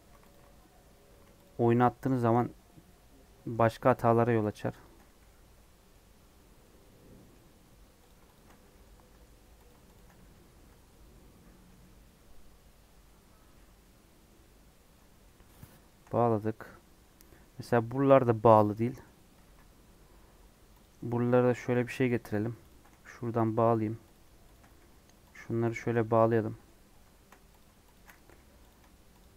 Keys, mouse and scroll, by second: 0.2 alt+click, 0.6 scroll down 1, 1.4 alt+shift+click, 2.1 alt+shift+click, 2.4 scroll down 1, 2.6-3.5 scroll up 4, 3.5 middle click, 4.1 1, 4.4 click, 5.1 j, 5.5-8.0 middle drag, 8.0 click, 8.5 j, 8.8 middle click, 9.6 click, 10.1 j, 10.4 scroll down 1, 10.5-15.1 middle drag, 15.1 scroll down 1, 15.2-16.2 middle drag, 16.2 scroll up 2, 16.5 middle click, 17.1 scroll down 2, 17.2 middle click, 18.0 scroll up 2, 18.5 middle click, 19.4 ctrl+r, 22.1 click, 23.0 j, 23.4 middle click, 24.1 click, 24.7 j, 25.3 click, 26.0 j, 26.3 middle click, 26.7 scroll up 1, 27.1 shift+middle click, 27.5 click, 28.2 j, 28.6 click.